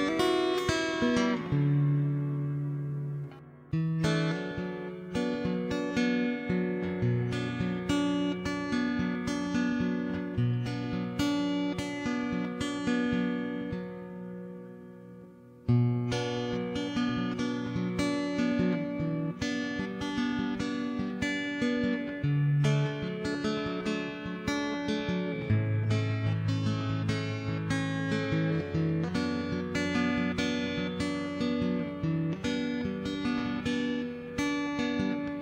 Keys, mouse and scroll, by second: 0.3 n, 0.9 d, 1.0 click, 1.0 d, 12.1 click, 12.8 shift+a, 13.1 n, 13.2 t, 13.4 middle click, 13.6 click, 14.4 middle click, 15.0 shift+a, 15.6 middle click, 15.8 click, 16.2 middle click, 16.6 click, 17.3 click, 18.1 middle click, 18.5 click, 19.3 Tab, 20.4 s, 22.4 g, 23.8 s, 25.5 middle click, 26.2 shift+s, 26.5 x, 26.9 shift+a, 27.5 middle click, 27.9 click, 28.8 middle click, 29.4 click, 30.4 click, 30.4 d.